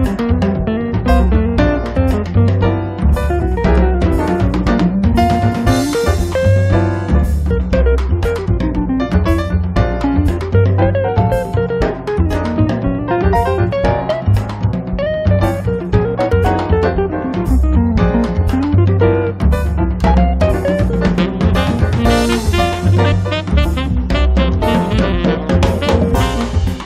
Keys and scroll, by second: 4.0 l, 6.0 8, 6.4 5, 6.6 Return, 10.1 r, 12.1 p, 16.7 ctrl+z, 18.0-19.2 typing, 24.3 r, 26.5 p.